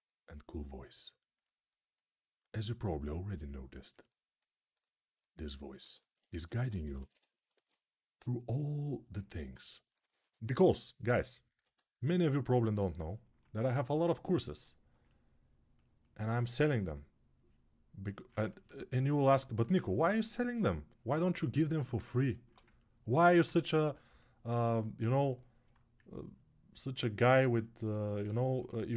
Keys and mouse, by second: 3.0-4.9 ctrl+alt+right drag, 5.6-6.6 ctrl+alt+right drag, 6.1 1, 6.6 [, 6.7 [, 6.9 [, 27.3-28.9 ctrl+alt+right drag.